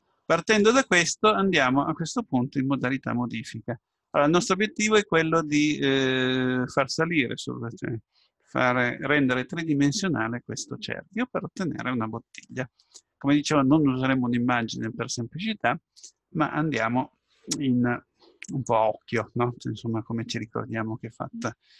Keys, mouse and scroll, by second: 4.1-4.6 scroll up 1, 4.6-13.0 middle drag, 14.6-16.4 middle drag, 18.5-20.5 drag.